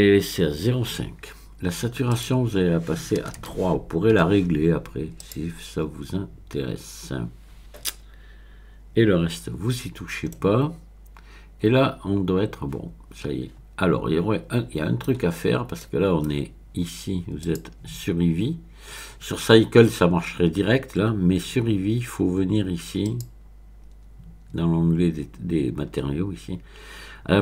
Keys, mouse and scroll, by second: 2.1 click, 3.2 BackSpace, 3.4 BackSpace, 4.3 KP_3, 5.2 click, 9.9-10.3 scroll down 1, 10.3-17.4 middle drag, 17.4-19.2 drag, 19.2-20.2 middle drag, 23.0 click, 25.5-26.7 scroll down 1.